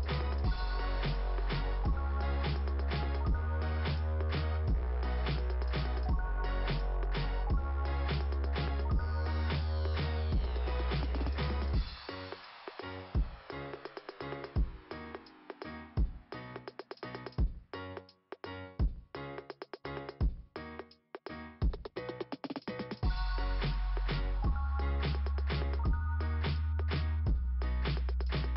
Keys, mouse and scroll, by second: 1.2 x, 1.7 click, 1.8 x, 2.0 click, 2.3 click, 4.3 click, 4.4 click, 4.5 click, 6.8-8.8 typing, 10.1 ], 10.5 x, 12.3 click, 13.7 ], 14.5 ], 15.2 click, 15.4 click, 15.5 click, 15.6 click, 16.0 click, 16.2 double click, 16.4 double click, 16.5 double click, 16.7 double click, 16.8 double click, 17.3 double click, 17.4 double click, 17.7 double click, 17.8 double click, 18.2 double click, 18.3 double click, 19.1 click, 19.2 click, 19.5 click, 19.6 click, 19.7 click, 19.8 double click, 19.9 double click, 20.1 double click, 20.2 double click, 20.3 double click, 21.5 double click, 21.6 click, 22.2 click, 23.6-23.9 scroll up 2.